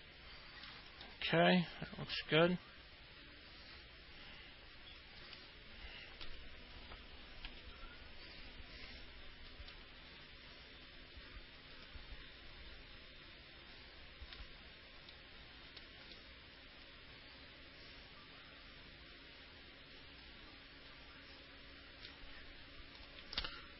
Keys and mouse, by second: 0.0 alt+middle click, 1.3-6.5 alt+middle drag, 10.0-14.5 alt+middle drag, 15.4 alt+middle click, 16.4-22.3 alt+middle drag, 23.2 click.